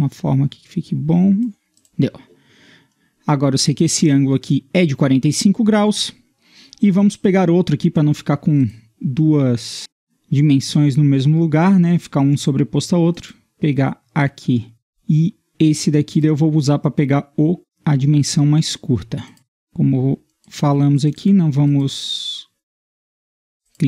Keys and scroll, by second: 22.7 Escape, 23.3 Escape.